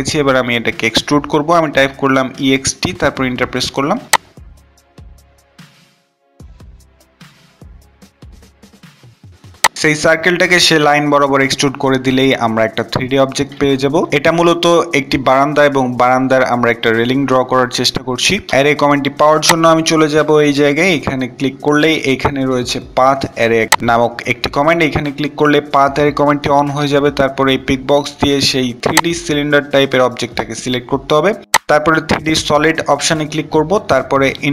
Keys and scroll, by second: 1.0-1.9 typing, 3.1 typing, 32.8 Return.